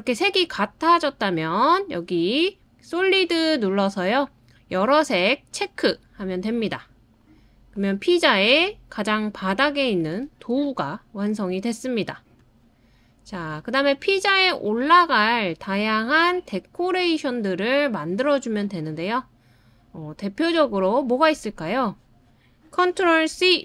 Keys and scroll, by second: 23.3 super+c.